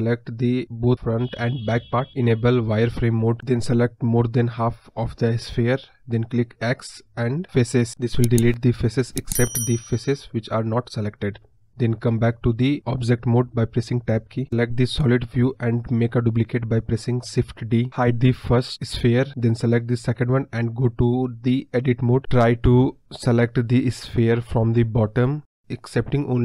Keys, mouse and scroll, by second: 0.1 click, 3.0 scroll up 2, 3.2-4.8 middle drag, 4.8 KP_1, 6.3-7.2 scroll up 1, 7.2-14.4 drag, 14.8 right click, 17.5 click, 19.3 click, 21.4 click, 24.9 click, 25.7 click.